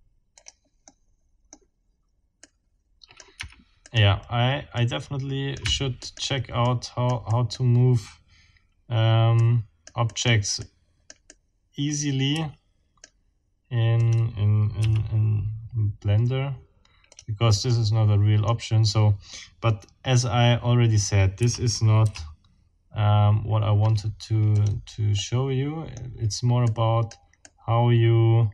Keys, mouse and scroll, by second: 0.3 click, 0.9 click, 2.4 right click, 2.5 middle click, 3.4 Escape, 3.8 right click, 3.9 middle click, 4.8 right click, 5.6 Escape, 6.0 right click, 6.6-7.8 right drag, 9.4 right click, 10.2 right click, 10.3 right click, 10.6-13.2 right drag, 12.3 x, 14.0 click, 14.8 r, 17.1 click, 17.7 middle click, 21.4 r, 22.0 z, 24.6 click, 25.2-26.2 middle drag, 26.6 right click, 27.4-28.5 right drag.